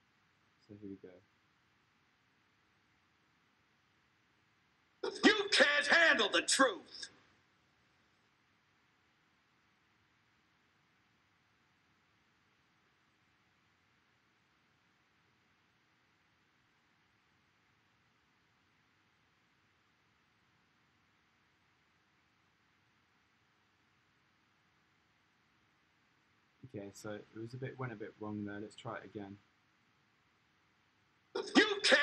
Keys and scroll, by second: 4.8 space, 11.0 super+r, 19.9 space, 26.0 space, 31.9 space.